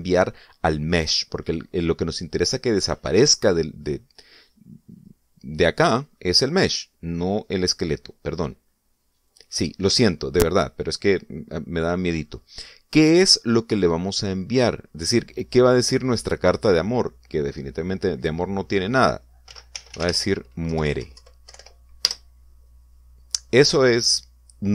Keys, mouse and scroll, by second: 9.2 click, 10.2 click, 14.3 click, 20.2-21.6 typing, 22.4 Delete, 22.4 End, 23.0 Return.